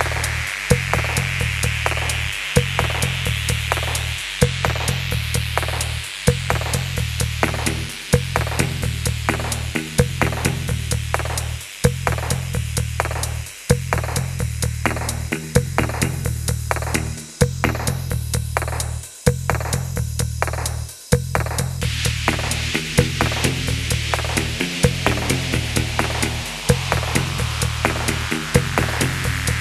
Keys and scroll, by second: 0.0-4.0 typing, 5.8 1, 9.2-9.9 typing, 11.3 alt+a, 12.2 w, 13.1 alt+a, 13.4 w, 14.4 alt+a, 15.1 w, 15.8 ctrl+f, 15.9 g, 17.1 alt+a, 17.7 ctrl+f, 17.8 g, 18.3 Tab, 19.6 Tab, 19.8-21.9 typing, 23.0 0, 23.1 Return, 24.0 g, 25.3-26.3 typing, 27.3-28.6 typing, 28.7 Up, 28.8 Up, 29.0 Return.